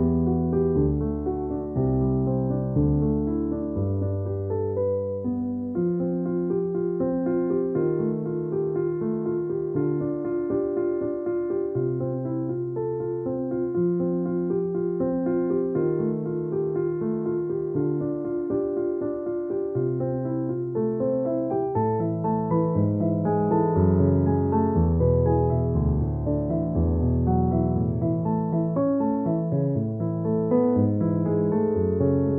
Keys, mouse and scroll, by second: 0.8 alt+click, 2.6 alt+click, 5.2 alt+click, 5.6 alt+click, 6.4 space, 6.6 click, 6.7 space, 7.6 alt+click, 9.4 alt+click, 11.1 space, 11.3 click, 11.4 space, 11.8 alt+click, 13.0 space, 13.1 click, 13.3 space, 14.2 click, 14.8 ctrl+-, 16.4 space, 16.5 click, 17.4 ctrl+=, 18.8 ctrl+click, 19.7 ctrl+g, 20.4 ctrl+-, 20.8 click, 22.0 ctrl+=, 22.8 space, 23.0 click, 23.1 space, 23.7 ctrl+=, 26.1 click, 29.6 space, 30.0 b, 31.0 click.